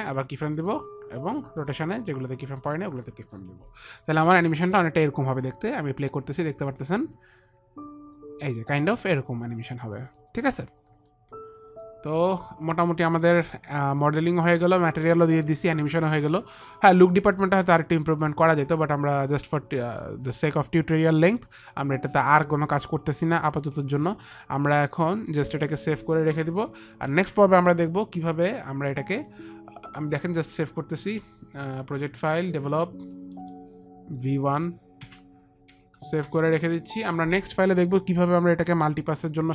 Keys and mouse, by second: 0.1 click, 2.5 click, 4.4 click, 4.9 click, 5.9 click, 24.5 click, 27.5 ctrl+s, 32.6 click, 33.6 click, 34.0 click, 34.8 click, 35.5 v, 36.1 KP_1, 36.7 Return, 39.1 Return, 39.1 KP_1, 39.1 v.